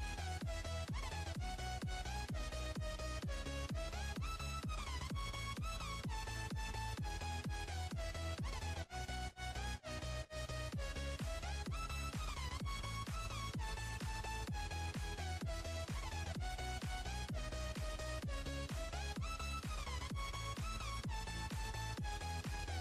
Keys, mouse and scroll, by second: 0.4-1.7 scroll up 1, 1.7 click, 2.6 Tab, 4.3 drag, 5.3 drag, 5.9 click, 6.7 click, 7.5 click, 8.4-11.3 drag, 14.6 l, 16.3 Tab, 16.9 scroll down 2, 18.0 click, 21.8 scroll down 1.